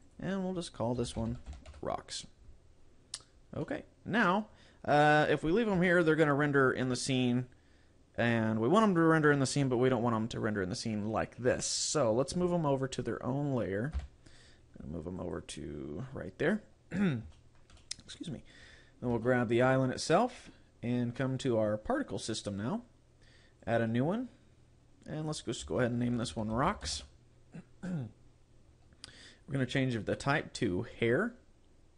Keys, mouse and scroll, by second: 0.1 click, 3.1-3.7 scroll down 6, 3.7 middle click, 5.9 shift+middle click, 14.1 m, 16.7 scroll down 3, 17.3 shift+middle click, 17.8 middle click, 18.6 right click, 18.9-19.3 scroll down 2, 19.3 shift+middle click, 19.7 middle click, 22.7 click, 23.7 click, 26.5 click, 30.1 click.